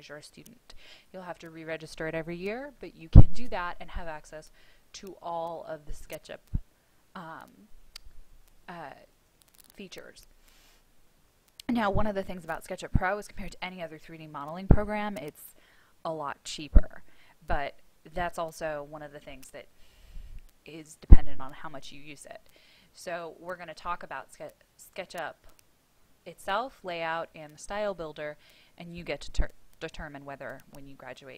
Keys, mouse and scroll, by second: 23.3-31.3 drag.